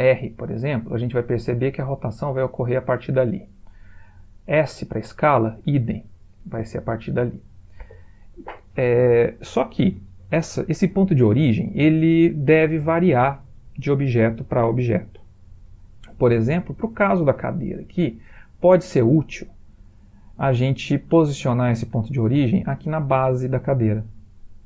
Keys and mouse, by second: 4.2 s, 12.4 middle click, 12.5 middle click, 12.7 middle click, 13.0 middle click, 14.4-14.9 middle click, 14.7 middle click, 14.7 middle click, 15.1 middle click, 22.1 middle click, 22.2 middle click, 22.5 middle click.